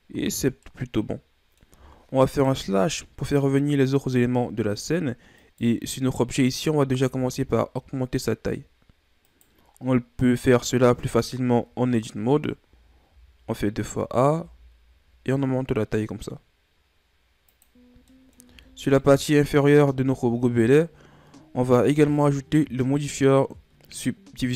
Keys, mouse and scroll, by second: 0.9-2.6 middle drag, 2.6 KP_Divide, 5.4-7.0 right drag, 7.0 s, 11.5 Tab, 12.6 a, 13.1 a, 14.3 s, 17.8 scroll down 1, 18.1 middle click, 18.4 Tab, 18.7 scroll down 2, 18.9 middle click, 19.5-20.0 scroll up 1, 20.0-20.5 scroll down 2, 20.5 right click.